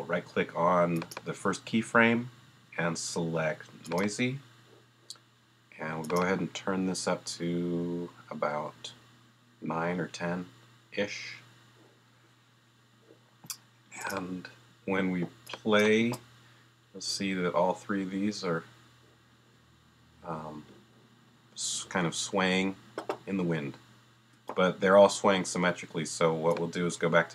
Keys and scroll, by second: 16.0 space, 24.3 space.